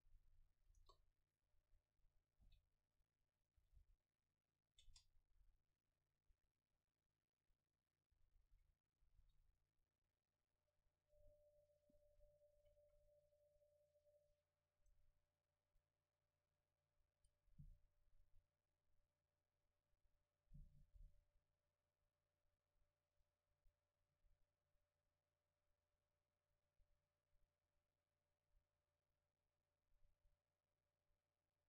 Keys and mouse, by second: 0.8 KP_0, 2.5 r, 3.5-4.7 drag, 3.6 r, 5.0 Tab, 5.5 a, 8.1 a, 8.5 a, 9.2 ctrl+s, 11.0-12.2 middle drag, 12.6 a, 12.9 a, 14.8 right click, 15.5 Tab, 16.6 Tab.